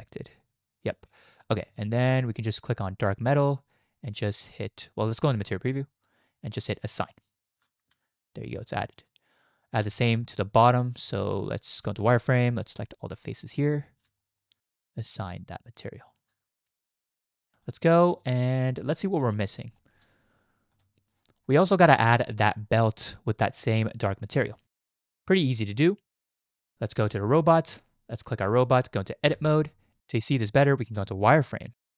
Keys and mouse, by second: 0.4 middle click, 1.3 z, 1.7 shift+middle click, 3.2 middle click, 6.9-7.5 drag, 6.9 z, 7.8 Tab, 8.8 shift+click, 9.8 Tab, 10.2 shift+middle drag, 10.8-11.7 middle drag, 11.8 z, 12.8 click, 14.2 shift+middle click, 15.2 click, 16.3 Tab, 16.7 z, 18.2 shift+drag, 19.8 shift+click, 20.7 click, 21.8 shift+drag, 26.2 click, 28.4 click, 29.8 Tab, 31.0 z, 31.8 shift+click.